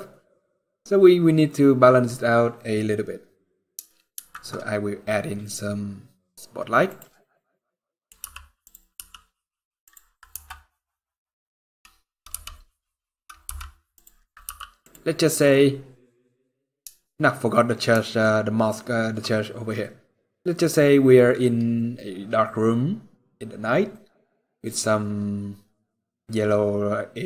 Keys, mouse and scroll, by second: 3.8 shift+a, 7.2-7.8 scroll down 4, 7.6 middle click, 7.9 g, 8.7 r, 10.1 g, 10.1 m, 14.2 g, 16.2 g, 17.9 shift+middle click, 20.2-20.9 scroll down 1.